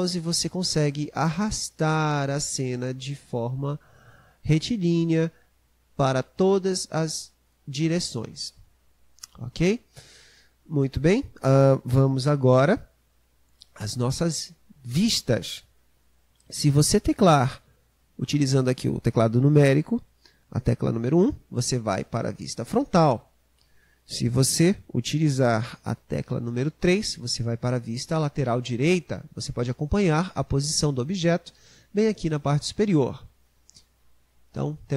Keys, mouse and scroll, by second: 21.2 KP_1, 26.9 KP_3.